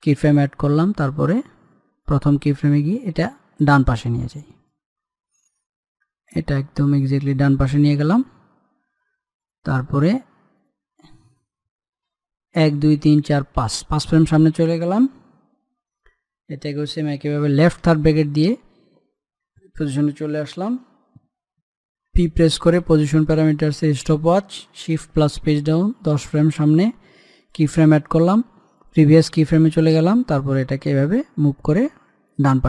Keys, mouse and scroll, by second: 5.5-7.1 middle drag, 7.1-10.2 drag, 13.2 Page_Down, 22.8 p, 23.9 click, 26.0 Page_Down, 28.2-32.6 drag.